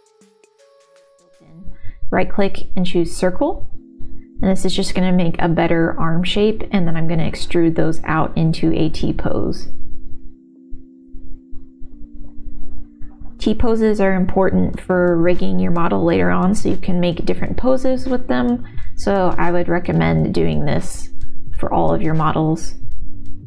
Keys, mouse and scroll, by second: 0.4-2.2 right drag, 4.7 r, 6.7-8.2 typing, 8.9 ctrl+z, 9.3 s, 9.8 r, 10.2 middle click, 10.4 middle click, 10.8 shift+middle click, 11.0 KP_1, 11.3 g, 12.6-13.6 middle drag, 13.8 KP_1, 14.3 e, 15.8 2, 16.9 ctrl+alt+shift+z, 16.9 alt+shift+click, 19.2 g, 20.3 middle click, 21.4 r, 22.5 g.